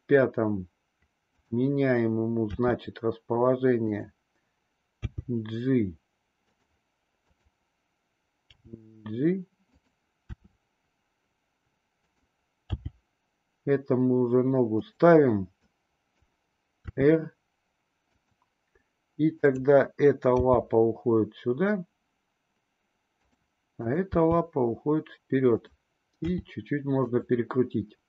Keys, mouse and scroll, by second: 2.5 r, 4.9 g, 7.1-7.8 drag, 8.4 g, 10.3 r, 12.6 g, 15.6 click, 16.9 r, 19.4-20.5 drag, 20.5 g, 23.8 click, 24.4 g, 26.1 r.